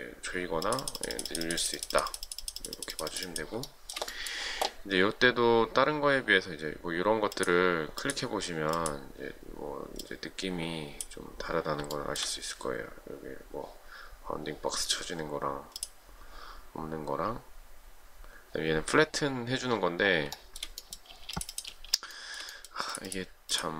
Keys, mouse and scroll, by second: 3.7 shift+middle click, 12.0 shift+middle click, 20.4 shift+middle click, 21.2 space, 22.2 shift+middle click.